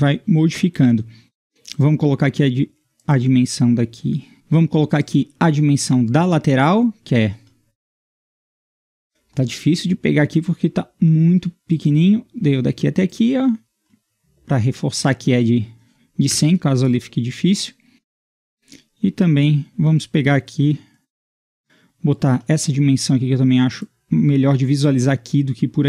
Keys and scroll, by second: 4.3 Escape, 16.3 Return, 18.4 d.